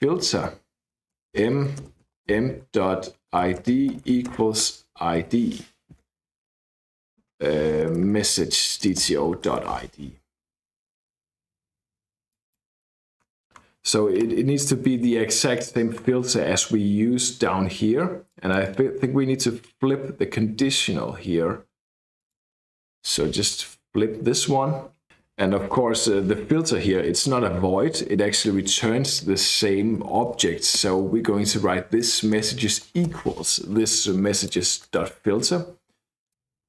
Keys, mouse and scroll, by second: 0.0-5.2 typing, 7.8-10.1 typing, 12.3 click, 13.2-14.2 scroll up 1, 14.2-15.3 scroll down 1, 15.6-17.4 scroll down 1, 18.3 click, 19.0-20.5 scroll up 1, 20.9-21.6 scroll up 1, 22.2 click, 23.0 shift+BackSpace, 23.1 shift+1, 28.5 Right, 29.7-31.3 typing, 32.1 Return, 32.4 space, 32.8 shift+=, 33.2 space, 34.4 click.